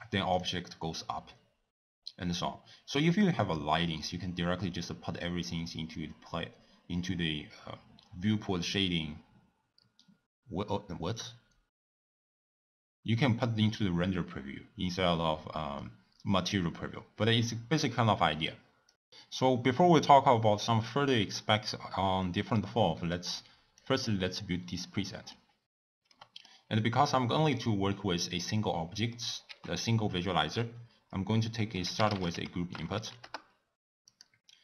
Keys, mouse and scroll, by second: 4.1 click, 23.0-23.8 middle drag, 23.8 click, 24.8-29.5 middle drag, 29.5 ctrl+a.